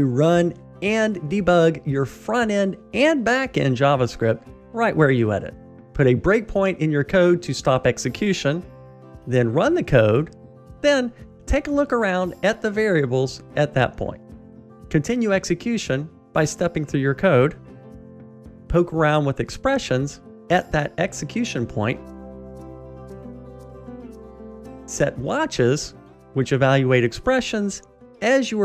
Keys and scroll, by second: 2.0 super+F8, 6.1 ctrl+shift+d, 14.7 F7, 18.5 alt+F8, 19.5 Tab, 22.1 Escape.